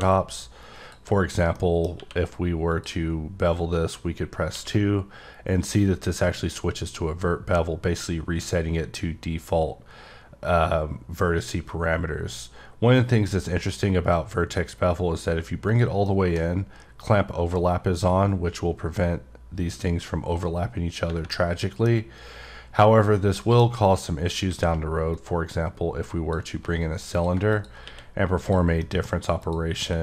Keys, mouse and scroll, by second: 0.6 click, 1.5 middle click, 2.7 click, 12.4 scroll up 5, 13.6-14.8 scroll up 5, 15.7 click, 16.0 middle click, 20.7-21.3 scroll down 2, 21.3 middle click, 22.9-23.4 scroll up 1, 23.4 middle click, 25.1 click, 27.1 click, 27.5 click, 28.4 click, 28.8 middle click, 29.1 scroll up 1, 29.4 click.